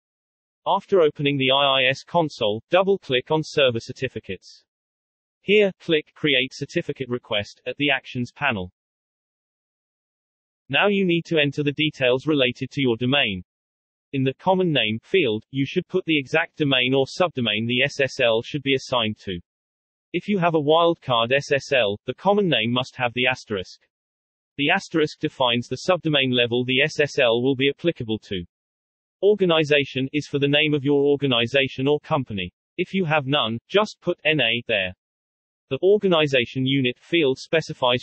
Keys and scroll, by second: 0.4 Return.